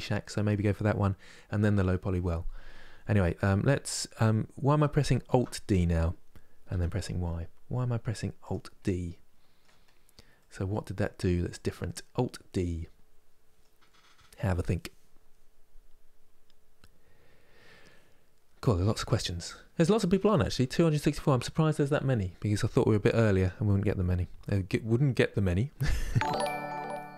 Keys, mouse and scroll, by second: 0.9 KP_3, 5.0 alt+d, 8.5-9.7 middle drag, 9.7-10.1 scroll down 1, 10.1 middle click, 11.0-11.5 scroll down 2, 11.5-14.6 middle drag.